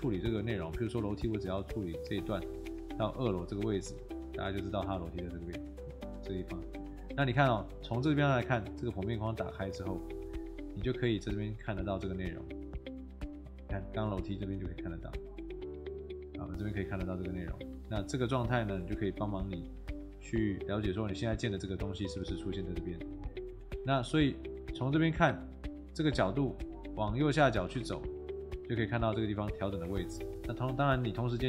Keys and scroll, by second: 4.2 Escape, 6.8 Escape, 18.2 Escape, 22.1 Escape, 28.7 Escape.